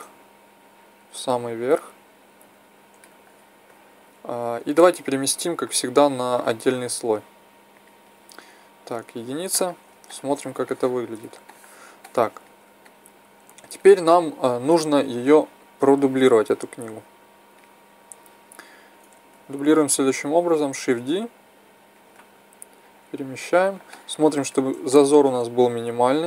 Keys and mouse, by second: 0.6-2.9 drag, 5.3 m, 7.7-9.1 drag, 9.1 KP_1, 12.7-14.9 middle drag, 15.2-17.2 middle drag, 18.9 KP_1, 20.7 shift+d, 22.8-24.3 drag, 25.8-26.2 middle drag.